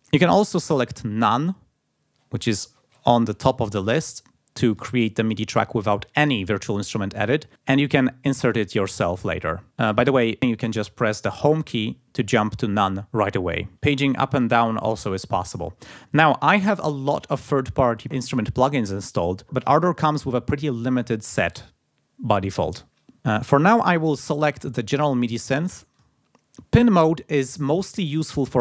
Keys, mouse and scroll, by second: 2.2-3.7 scroll up 4, 4.7 click, 9.9 click, 10.3 scroll down 1, 11.7 Home, 13.7 Page_Down, 14.4 Page_Up, 23.6-24.3 scroll down 2, 25.9 click, 28.3 click.